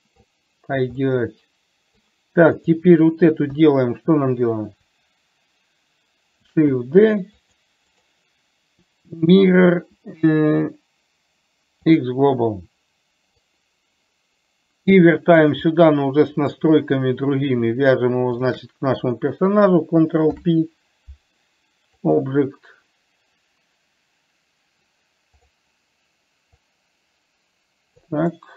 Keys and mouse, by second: 1.4-2.3 middle drag, 2.8 click, 3.8 KP_1, 6.7 shift+d, 9.8-13.8 right drag, 13.8-15.8 drag, 15.9-16.9 middle drag, 18.7 shift+click, 20.6 ctrl+p, 26.9-28.4 drag.